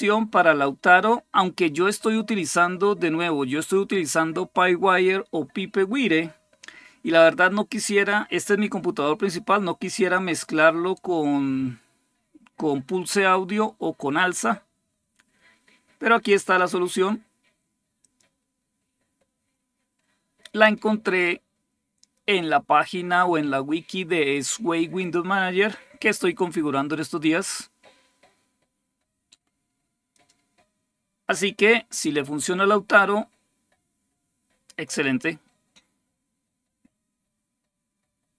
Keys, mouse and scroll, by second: 17.8 click, 29.9 click, 38.3 click.